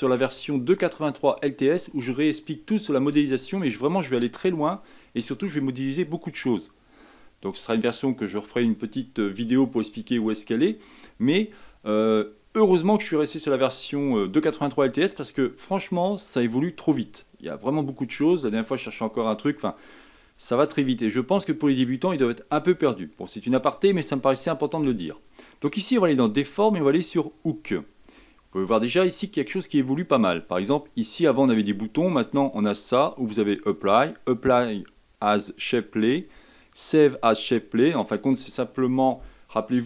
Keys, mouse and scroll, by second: 32.2-39.8 drag.